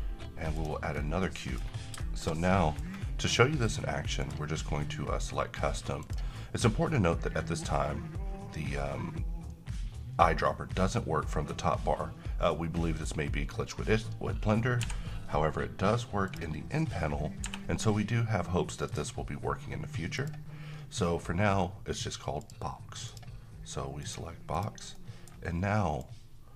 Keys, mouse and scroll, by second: 0.5 click, 0.9-1.3 scroll down 1, 1.3-1.8 middle click, 1.6 scroll down 1, 2.0-3.0 middle drag, 4.2 click, 14.8 n, 16.3 click, 17.5 n, 18.9 click, 24.9 middle click, 24.9-25.6 middle click, 26.0-26.5 click.